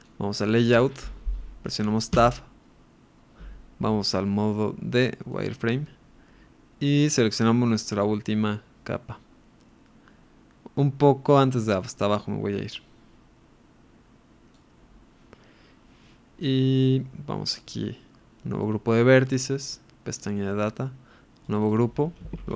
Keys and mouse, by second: 0.0 ctrl+r, 0.0 click, 2.6 Tab, 5.4 click, 8.0-14.7 drag, 19.3 click, 21.5-22.5 drag.